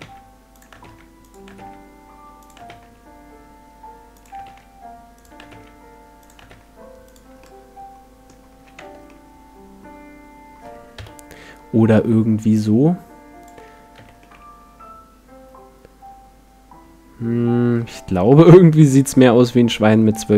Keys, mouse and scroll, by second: 0.0-1.6 typing, 2.7 shift+d, 4.5 shift+d, 5.5 shift+d, 6.5 shift+d, 7.4-8.5 middle drag, 8.5 a, 8.8 Tab, 9.2 middle click, 10.9 KP_1, 12.5-14.2 drag, 13.9 z, 14.2-16.1 middle drag.